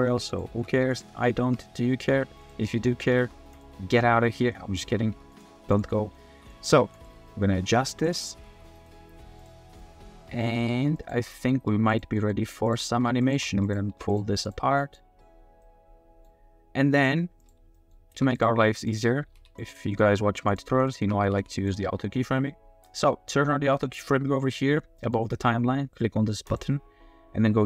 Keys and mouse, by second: 0.5 r, 0.9 drag, 1.2-1.5 shift+middle drag, 2.5 click, 3.1 r, 3.2 r, 3.5-4.9 drag, 5.1 r, 5.5 g, 6.0 click, 6.3 g, 6.5 r, 7.3-7.8 drag, 7.8 g, 8.0 click, 8.3 r, 8.5 r, 9.8-10.4 drag, 10.0 middle click, 10.2 middle click, 10.4 middle click, 10.6 r, 10.7 r, 11.3 middle drag, 11.5 r, 12.1 middle click, 12.9 r, 13.2 click, 13.4 r, 13.5 r, 13.9 r, 14.8 middle click, 15.6-16.2 middle drag, 17.4 middle click, 17.7 middle drag, 18.1 r, 18.2 z, 18.8 click, 19.2 r, 19.3 z, 19.8 drag, 20.5 click, 20.9 shift+click, 21.3 r, 21.3 z, 25.1 drag, 26.5 click.